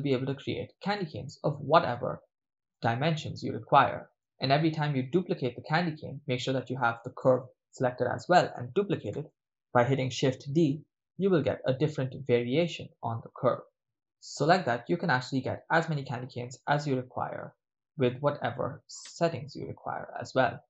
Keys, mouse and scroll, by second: 1.1-2.0 ctrl+middle drag, 2.8-4.2 middle drag, 7.2 ctrl+click, 10.0 shift+d, 13.8 click, 19.0 x.